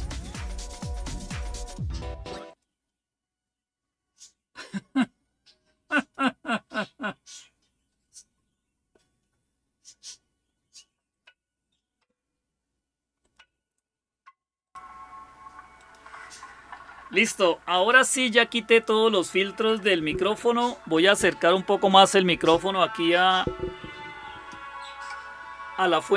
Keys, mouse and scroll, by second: 0.1 click, 2.3 click, 5.8 click, 6.5 click, 9.2 right click, 10.9 click, 13.0 click, 14.5 click, 15.6 click.